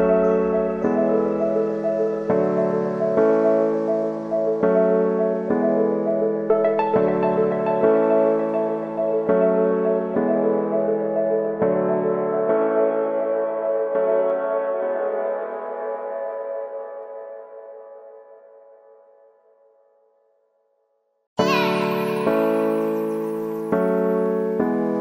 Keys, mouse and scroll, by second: 3.4 ctrl+alt+Home, 4.7 ctrl+z, 5.7 click, 6.8 ctrl+z, 8.2-11.5 drag, 11.5 ctrl+alt+Home, 13.1 click, 18.7 Return, 19.4-25.0 drag.